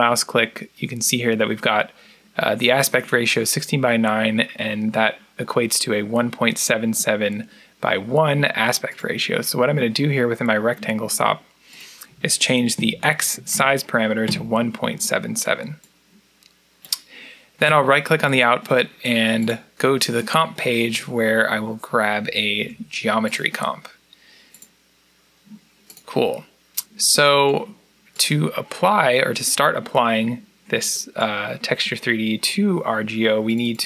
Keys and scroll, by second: 13.2 7, 13.4 7, 14.1 Return, 22.0 g, 22.4 e, 24.1-24.8 typing.